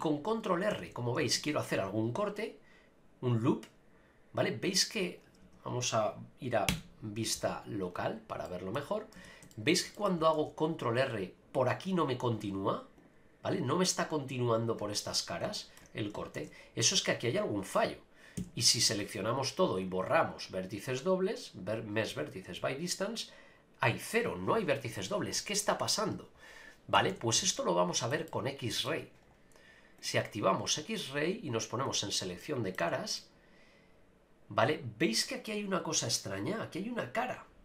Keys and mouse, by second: 0.7 a, 0.9 a, 1.3 ctrl+r, 5.4 Tab, 6.7 KP_Divide, 8.4 middle click, 9.2 Tab, 9.5 shift+middle click, 9.9 middle click, 10.3 ctrl+r, 13.0 click, 15.5 shift+middle click, 16.3 ctrl+z, 18.4 a, 19.8-20.5 drag, 20.5-22.5 right drag, 27.0 a, 27.1 a, 27.5 shift+middle click, 28.2 middle click, 30.7 middle click, 32.5 middle click, 32.8 a, 33.2-35.5 middle drag.